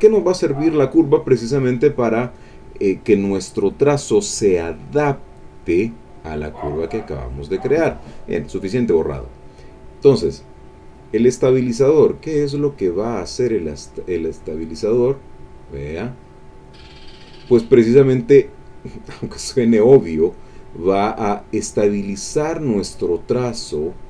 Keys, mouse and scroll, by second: 5.4 click, 6.1 click, 6.7-7.9 drag, 9.1 click, 11.5-12.6 drag, 13.6-16.8 drag, 17.9-20.7 drag, 21.6-24.0 drag.